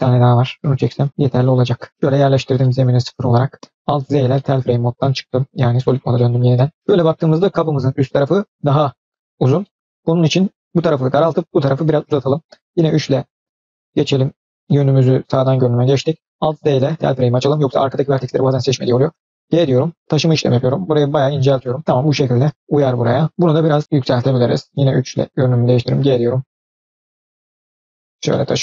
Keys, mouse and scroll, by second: 0.4 shift+click, 1.1 g, 1.9 middle click, 1.9-2.5 scroll down 3, 2.2 click, 2.5-3.5 middle drag, 3.5 scroll down 1, 3.8 alt+z, 4.2 middle click, 6.0-7.1 middle drag, 9.5 middle click, 12.5 KP_3, 13.5-14.0 scroll up 3, 14.3 shift+middle click, 16.3 alt+z, 16.6 click, 18.7 g, 22.9 middle click, 24.6 KP_3, 25.3 click, 25.7 g, 27.9 click, 28.2 middle click.